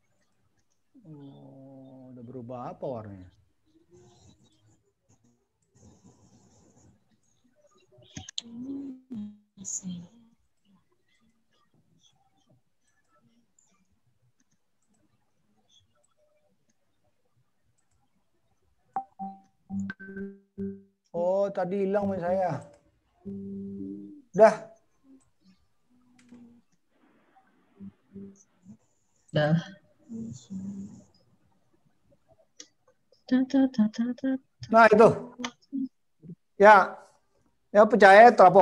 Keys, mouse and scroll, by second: 0.4 click, 5.7 click, 8.1 click, 9.5 click, 11.1 click, 16.2 click, 18.9 click, 26.0 click.